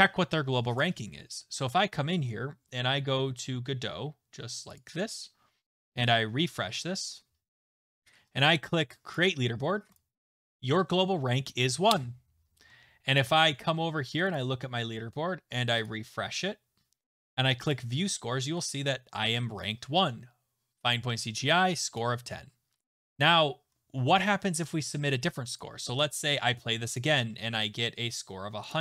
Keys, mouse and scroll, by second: 0.8 click, 8.4 click, 9.1 click, 9.9 click, 13.2 click, 14.6 click, 15.9 click, 17.7 click, 22.8 alt+Tab, 25.6 click, 26.0 right click, 27.0 click, 28.7 click.